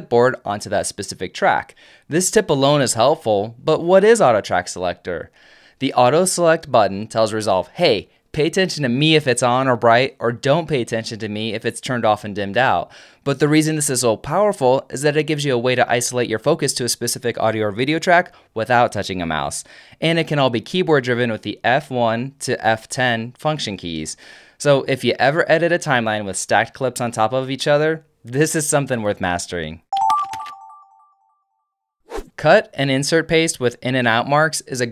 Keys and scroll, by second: 21.5 alt+super+F1, 21.9 alt+super+F2, 22.5 alt+super+F3, 23.0 alt+super+F4, 23.4 alt+super+F5.